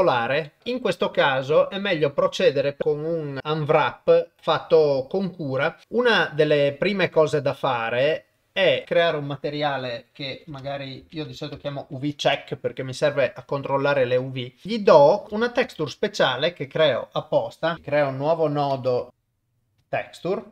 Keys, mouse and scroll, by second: 0.4 middle click, 8.8-12.2 drag, 14.8 middle click, 15.2 click, 15.6 shift+a, 19.1 BackSpace.